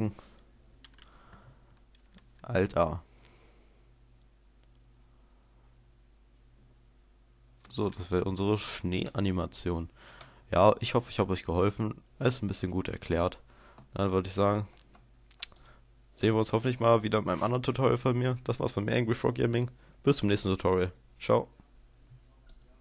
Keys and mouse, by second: 2.3 alt+a, 7.9 alt+a.